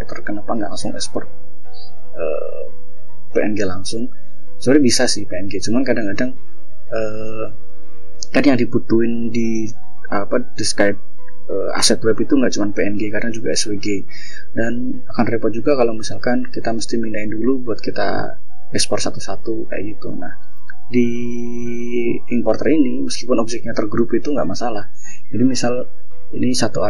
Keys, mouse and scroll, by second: 2.6 scroll down 1, 3.7 scroll down 1, 4.7 click, 5.4 click, 18.8 click, 19.8 click, 22.4 scroll down 2, 25.4 ctrl+scroll down 3, 26.0-26.7 ctrl+drag.